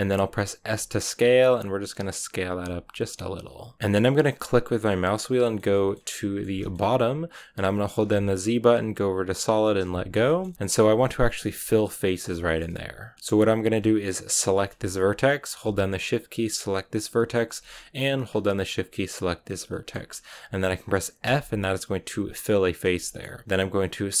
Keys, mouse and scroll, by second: 1.0 s, 2.5 g, 3.7-4.4 scroll up 1, 4.4-5.8 middle drag, 5.8 scroll up 1, 6.1 middle click, 6.7-9.8 scroll up 1, 9.8 z, 10.1 shift+middle click, 10.8-12.5 middle drag, 12.5-14.3 scroll up 1, 14.3 right click, 14.6 shift+middle click, 14.9-16.6 scroll up 1, 16.6 shift+right click, 16.9 scroll up 1, 17.1-19.3 middle drag, 19.3 shift+right click, 19.6-21.1 shift+middle drag, 21.1 f, 22.9-24.2 shift+middle drag.